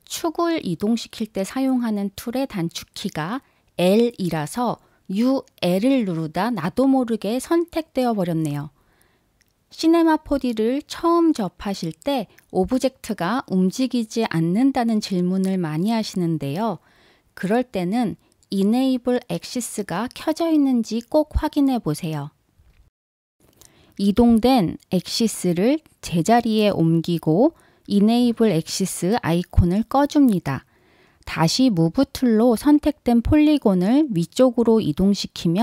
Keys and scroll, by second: 22.6 super+z.